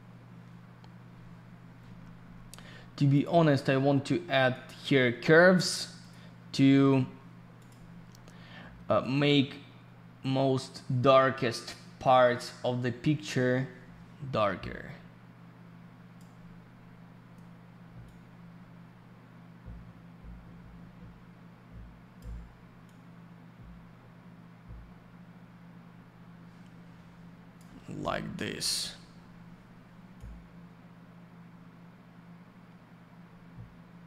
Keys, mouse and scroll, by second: 3.1 click, 3.2 click, 4.5 click, 4.6 click, 6.0 click, 6.1 click, 7.6 click, 7.7 click, 9.0 click, 18.0 click, 22.8 click, 30.2 click.